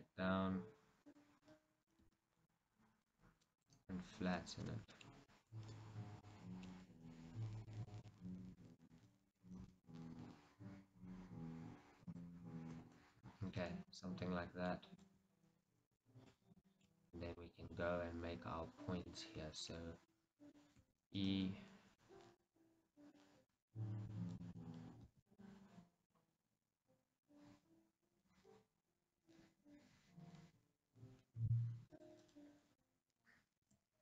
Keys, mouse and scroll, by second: 1.3 click, 1.6-3.8 middle drag, 2.1 s, 3.8 click, 4.0-12.3 middle drag, 9.7 s, 12.3 click, 12.8 KP_1, 13.8 shift+middle click, 17.1-17.6 scroll up 2, 17.3 middle click, 17.8-20.9 middle drag, 20.9 e, 21.4-23.3 right drag, 23.3-25.2 middle drag, 25.2 s, 32.1-33.8 drag, 33.8 s.